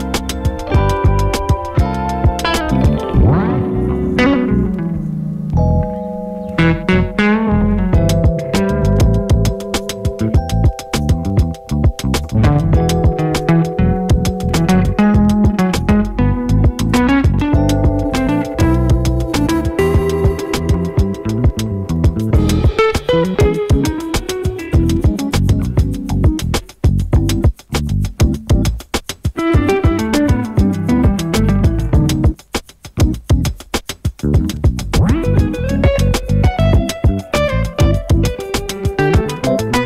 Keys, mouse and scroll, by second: 1.9 space, 6.6 space, 7.4 click, 8.7 F9, 9.4-18.1 drag, 18.1-22.2 drag, 22.4 space, 24.5 space, 24.9-28.2 drag, 29.3 u, 30.1 click, 32.2 ctrl+shift+c, 36.0 click, 36.1 ctrl+a, 37.0 typing, 38.6 Return.